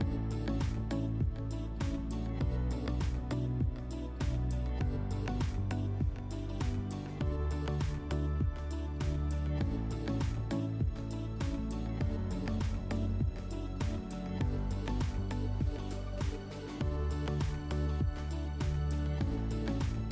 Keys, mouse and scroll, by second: 0.0 click, 1.8 click, 2.2 click, 3.3 middle click, 6.4 click, 6.9 click, 7.7 click, 8.3 click, 9.0 click, 9.4 click, 9.7 click, 13.0 scroll, 13.8 click, 15.3 click, 16.0 click.